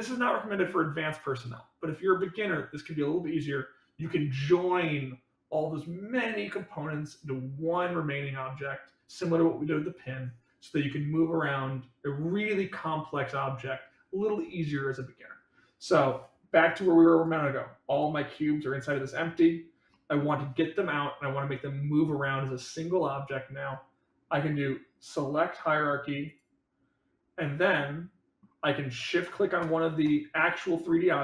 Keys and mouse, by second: 17.1 click, 17.8 click, 19.8 middle drag, 27.6 middle click, 29.5 shift+click.